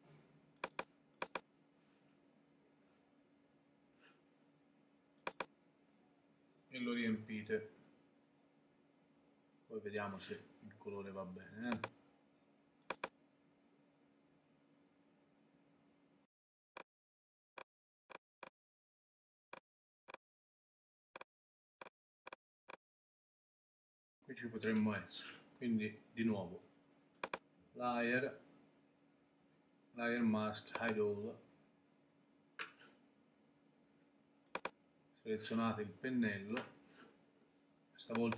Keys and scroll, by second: 7.2 super+BackSpace.